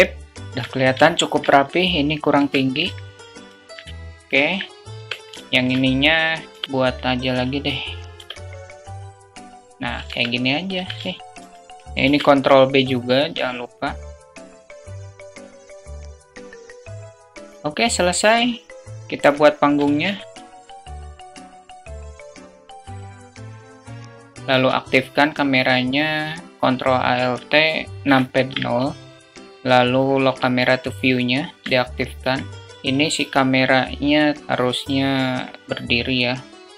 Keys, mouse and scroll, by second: 0.9 alt+shift+middle drag, 2.2 Tab, 2.6 alt+z, 2.9 click, 3.9 click, 4.7 Tab, 5.1 alt+shift+click, 6.3 i, 6.6 e, 6.6 s, 7.9 i, 9.1 click, 9.8 Tab, 11.3 2, 11.8 ctrl+b, 14.6 ctrl+b, 15.5 ctrl+b, 16.1 Tab, 16.3 middle drag, 16.5 `, 16.9 alt+shift+drag, 18.8 click, 19.6-22.9 typing, 21.2 alt+click, 21.4 click, 21.5 Tab, 21.8 alt+shift+click, 22.4 ctrl+b, 22.7 Tab, 23.2 alt+shift+middle click, 23.6 shift+middle click, 27.8 ctrl+alt+KP_0, 29.1 q, 30.5 alt+shift+drag, 31.5 alt+shift+click.